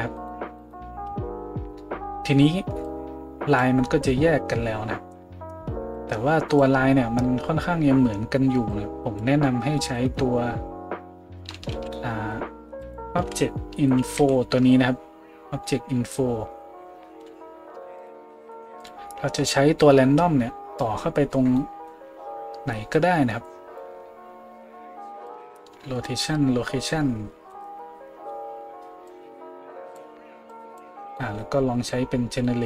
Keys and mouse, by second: 0.2 middle click, 0.2 right click, 0.6 middle click, 0.6 right click, 1.1 a, 11.7 shift+a, 18.9-19.8 middle drag, 19.8-32.6 drag.